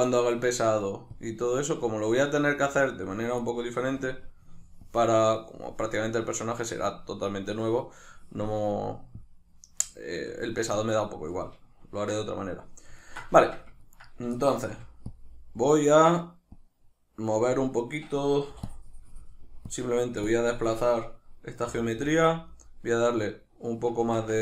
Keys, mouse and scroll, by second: 3.4 right click, 4.8-9.0 drag, 10.0-15.2 shift+middle drag, 13.3 Tab, 14.7 f, 15.2 click, 18.5-24.4 drag, 18.5 i, 21.7 g, 24.1 Tab.